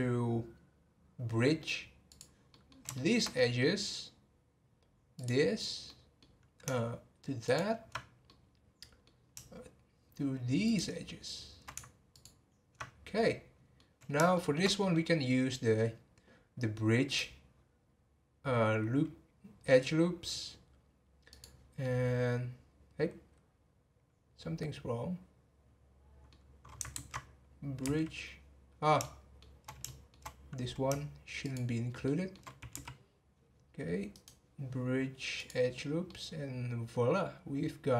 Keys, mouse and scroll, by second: 2.1 click, 2.5 middle click, 3.2-3.6 scroll up 3, 3.6-5.1 middle drag, 5.1 click, 5.8-7.4 middle drag, 7.4 ctrl+click, 8.3-10.6 middle drag, 10.6 shift+click, 12.1 ctrl+click, 12.9 scroll down 3, 13.1-15.1 middle drag, 15.1-15.9 scroll up 1, 15.9-17.1 scroll up 3, 17.1-21.8 right drag, 21.8-24.8 middle drag, 26.9 ctrl+z, 27.8 x, 29.0-31.4 shift+middle drag, 31.4 shift+click, 32.0 shift+middle click, 32.7 x, 34.1-36.0 right drag, 36.0-37.9 middle drag.